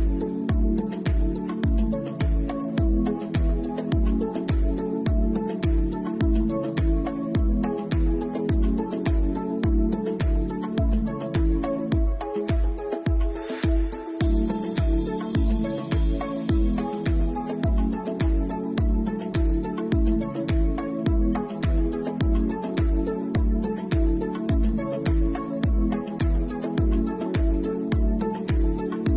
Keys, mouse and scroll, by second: 0.0 click, 0.4 middle click, 1.5 click, 2.7 ctrl+shift+click, 3.1 middle click, 4.9 shift+middle click, 5.4-5.7 scroll up 6, 6.2-6.7 scroll down 3, 6.6 middle click, 8.7 ctrl+shift+click, 9.0 middle click, 10.7 ctrl+shift+click, 11.1 middle click, 12.0 scroll down 4, 13.4 right click, 13.4-13.8 scroll down 5, 16.1 right click, 16.1 a, 16.1 u, 17.6 middle click, 18.1 Tab, 19.1 click, 20.4 Tab, 22.6 u, 22.8 u, 23.7-24.6 scroll down 5, 24.6 shift+middle click, 25.4-25.8 scroll down 1, 25.8 middle click, 26.8 shift+middle click, 28.4 Tab.